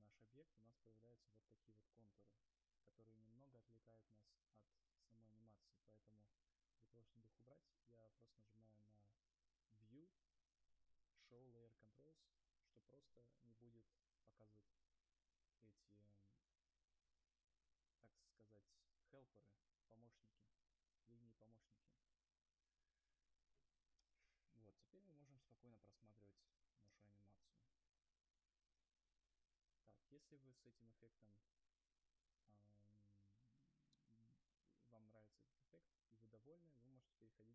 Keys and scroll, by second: 27.2 0.